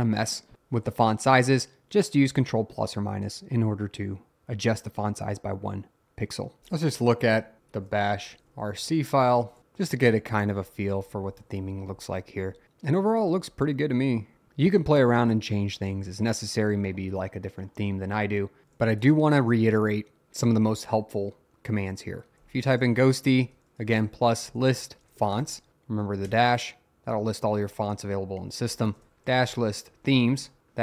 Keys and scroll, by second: 6.6 Return.